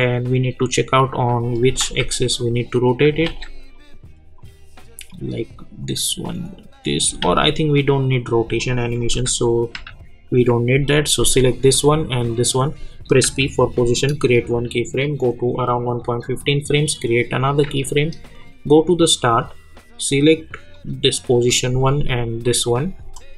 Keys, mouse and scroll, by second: 0.5 click, 1.8 ctrl+z, 2.4 click, 3.3 ctrl+z, 3.7-7.2 drag, 7.2 ctrl+z, 8.6 click, 9.1-9.8 typing, 11.5 click, 13.2 p, 23.1 ctrl+click.